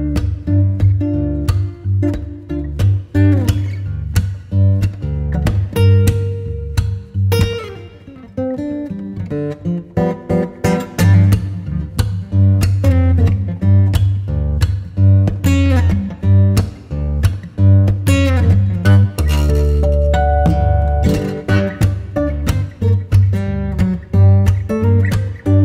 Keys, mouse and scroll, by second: 0.6 ctrl+z, 1.6-4.6 right drag, 4.6 scroll down 1, 4.7 scroll up 1, 5.0 Tab, 5.1 right click, 5.6-6.9 scroll up 1, 6.9 click, 7.9 ctrl+k, 9.3 click, 10.8 right click, 11.4 click, 12.3 ctrl+k, 13.9 click, 15.6 right click, 16.3 ctrl+shift+click, 17.6 ctrl+b, 21.5 click, 22.0 right click, 23.3 ctrl+shift+click.